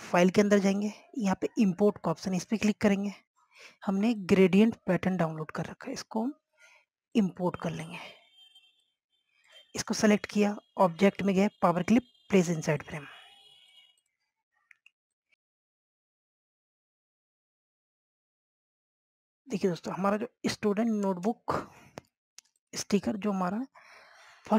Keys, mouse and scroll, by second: 7.3-8.3 scroll down 1, 8.3 click, 10.2 scroll up 1, 10.6 click, 11.4 scroll down 1, 12.1 click, 14.3-14.8 scroll up 1, 14.8 click, 15.4 scroll up 1, 16.3 click, 17.5 scroll down 1, 19.4 click, 21.0 z, 21.3-22.9 drag.